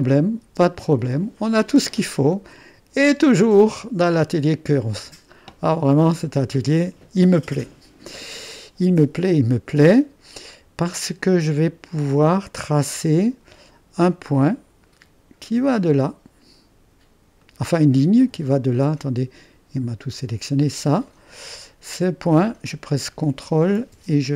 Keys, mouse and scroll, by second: 0.4 space, 3.0-4.2 drag, 4.7-7.8 drag, 9.7-10.4 scroll up 1, 10.4-13.1 drag, 17.4-20.2 drag.